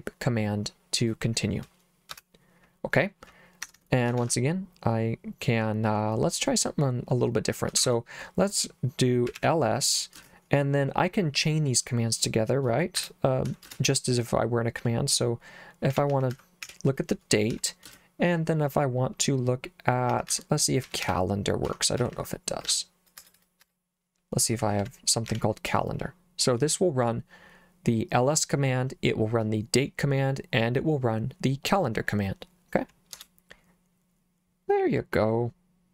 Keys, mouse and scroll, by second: 2.1 Return, 3.6 Escape, 4.2 shift+;, 7.8 shift+1, 9.0-10.1 typing, 13.0 BackSpace, 13.5 ;, 13.7 space, 15.7-17.8 typing, 19.8-25.3 typing, 33.1 Return.